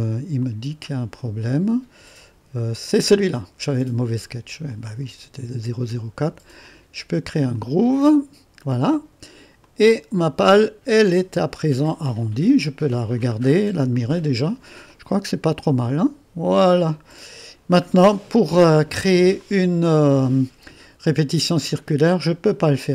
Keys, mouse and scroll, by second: 0.5 click, 1.2 click, 2.8-3.9 drag, 4.7 click, 6.7-11.9 drag, 12.3 click, 13.6-14.4 scroll up 1, 14.0 click, 15.0-17.2 drag, 18.2 click, 19.5 click.